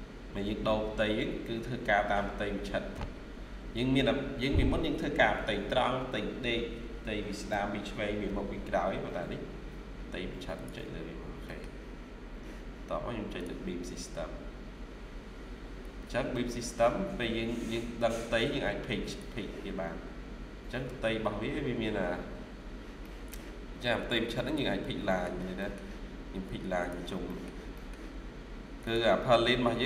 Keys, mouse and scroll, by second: 9.3 scroll down 1, 10.9 scroll down 1, 11.3 middle click, 22.9 middle click, 24.7-25.2 scroll down 2, 25.0 middle click, 25.5 middle click, 25.8-26.4 scroll up 1, 27.1 middle click, 27.9-28.3 scroll down 1.